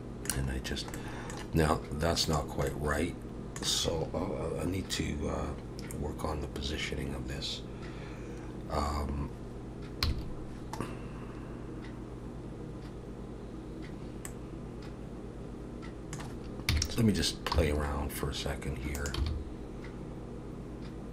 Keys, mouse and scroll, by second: 0.6-0.9 scroll down 2, 0.9 middle click, 2.3 click, 2.7 middle click, 10.0 KP_3, 14.3 middle click, 16.7 KP_3, 17.5 r, 19.2 g.